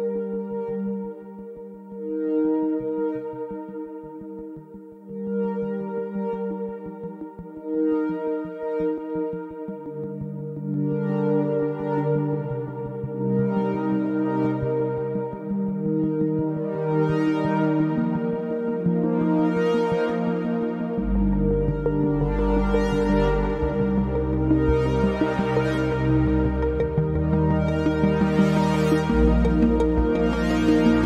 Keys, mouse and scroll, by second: 0.3 u, 2.4 click, 6.9 right click, 9.6 click, 10.2 alt+middle click, 11.7 ctrl+click, 22.0 alt+middle click, 22.6 scroll down 1, 22.9 alt+middle click, 23.3-23.7 scroll up 1, 23.7 scroll down 1, 25.1 click, 26.3-26.7 scroll up 1, 27.1 click, 30.1 scroll down 1, 30.4 alt+middle click, 30.8 click.